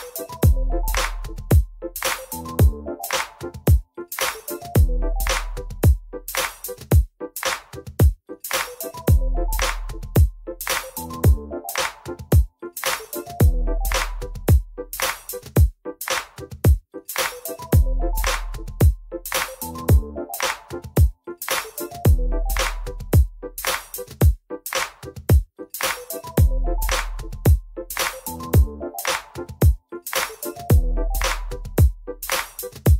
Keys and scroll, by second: 1.0 F3, 5.1 alt+q, 6.1-7.4 typing, 7.8 F3, 15.7 w, 18.6 ctrl+z, 20.0 ctrl+y, 21.2 ctrl+y, 21.6 w, 22.3 e, 28.7 Return, 32.5 4.